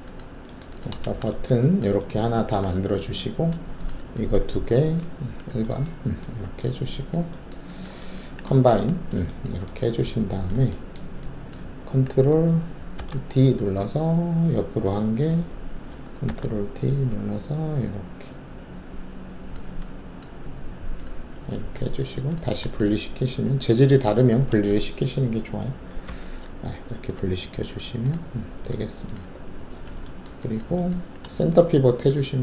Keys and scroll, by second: 1.0 alt+shift+a, 5.1 alt+shift+1, 8.6 alt+shift+a, 12.9 ctrl+alt+d, 16.2 ctrl+d, 26.0 shift+y.